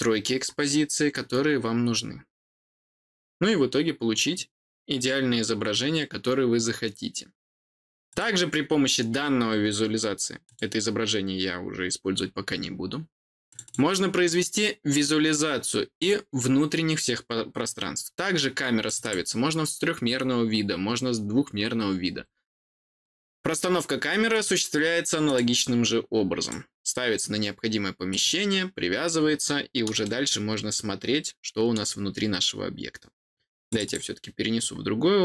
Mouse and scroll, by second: 8.0 click, 10.4 click, 12.1-12.6 scroll down 4, 12.5 middle click, 13.4 click, 13.6 click, 15.9 click, 18.8 click, 19.0 click, 24.3 click, 25.2 click, 26.4 click, 28.0 click, 30.0-31.7 middle drag, 33.6 click, 33.8 click.